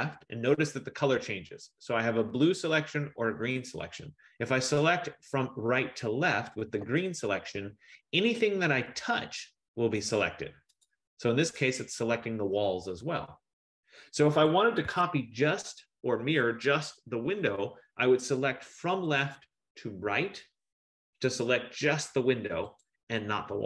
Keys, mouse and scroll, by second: 3.5 click, 11.1 click, 15.0 Escape, 19.2 click, 20.3 F15, 23.0 click.